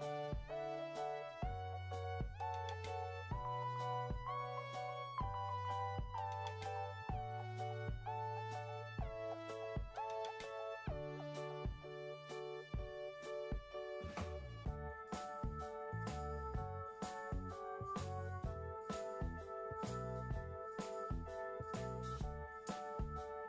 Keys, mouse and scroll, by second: 7.8 1.